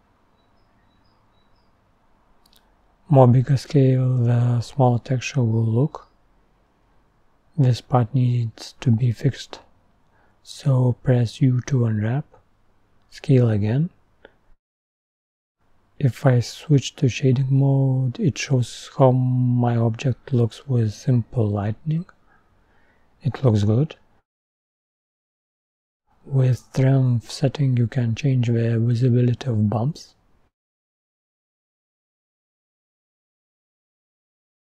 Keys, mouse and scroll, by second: 6.4-6.9 scroll up 4, 16.6-18.6 middle drag, 18.6-20.6 scroll down 4.